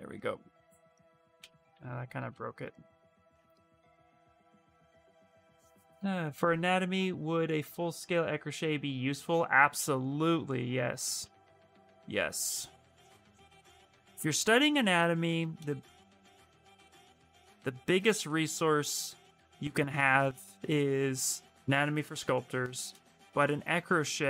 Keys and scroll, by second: 1.3 ctrl+z, 1.5 ctrl+z, 2.0 ctrl+z, 2.2 ctrl+z, 2.7 ctrl+z, 3.0 ctrl+z, 3.3 space, 4.1 space, 10.1 space, 11.0 ctrl+z, 11.4 ctrl+z.